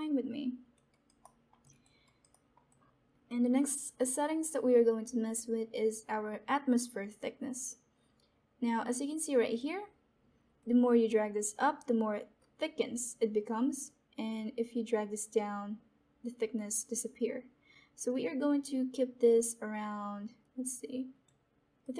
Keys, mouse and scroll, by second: 0.8 alt+right click, 1.5 alt+middle click, 1.6 alt+click, 2.2 alt+right click, 2.6 alt+middle click, 2.9 alt+click, 8.8-20.5 drag, 21.7 click.